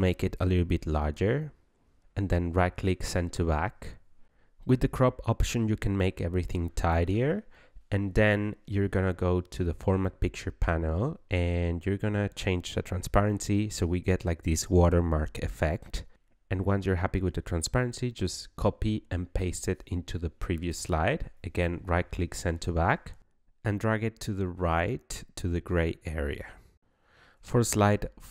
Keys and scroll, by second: 17.5 ctrl+c, 18.9 ctrl+v.